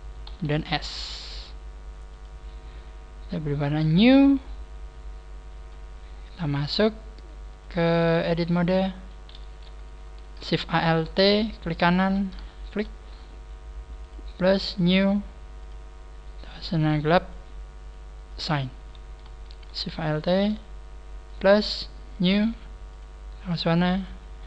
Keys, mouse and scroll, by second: 0.2 s, 2.1 click, 4.1 click, 6.1-6.5 scroll up 7, 7.5 click, 8.5 click, 9.1-9.5 scroll up 3, 9.5 a, 10.1 alt+shift+right click, 10.8 a, 11.1 scroll up 4, 11.7 alt+shift+right click, 12.5 alt+shift+right click, 14.0 click, 14.7 click, 17.6 click, 18.2 click, 18.7 a, 19.6 alt+shift+right click, 20.2 alt+shift+right click, 21.2 click, 21.3 click, 22.2 click, 22.9 click.